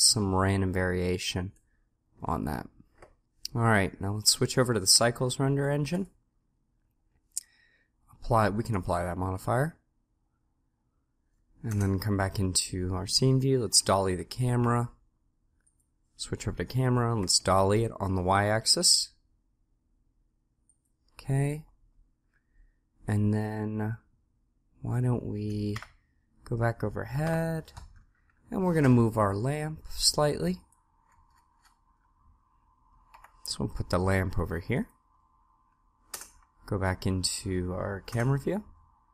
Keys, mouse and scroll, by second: 4.6-6.5 drag, 11.6 KP_0, 13.5 g, 17.1 g, 25.7 KP_7, 27.2 KP_7, 30.7 right click, 31.0 middle click, 31.2-32.3 scroll up 1, 33.3 g, 36.1 KP_0, 38.1 KP_0.